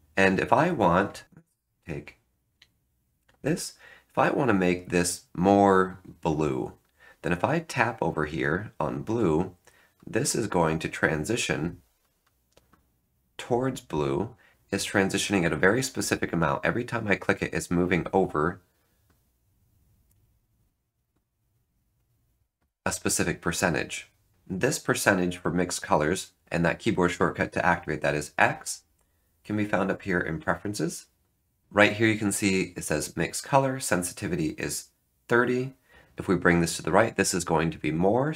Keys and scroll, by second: 24.3 F9.